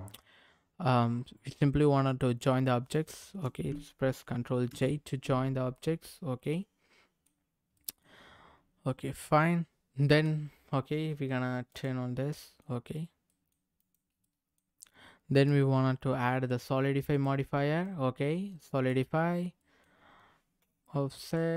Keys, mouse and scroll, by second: 2.9 shift+click, 4.7 ctrl+j, 5.7-7.3 middle drag, 7.7 middle click, 8.2-8.8 scroll up 3, 8.8-10.3 middle drag, 11.7 click, 12.3 middle click, 13.0 scroll down 1, 13.3 middle click, 13.8 click, 14.2 middle click, 15.3 click, 17.1 click, 17.8-18.9 drag, 19.6 middle click, 20.7 click.